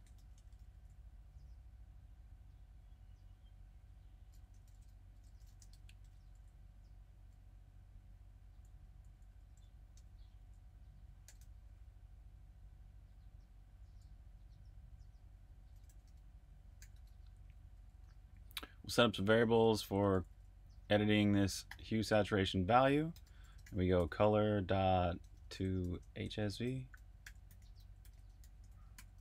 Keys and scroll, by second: 0.0-0.6 typing, 4.6 shift+super+f, 4.8-5.8 typing, 6.0 Return, 7.6-9.9 typing, 11.1-11.8 typing, 12.8-14.1 typing, 15.6-21.6 typing, 22.8-29.2 typing.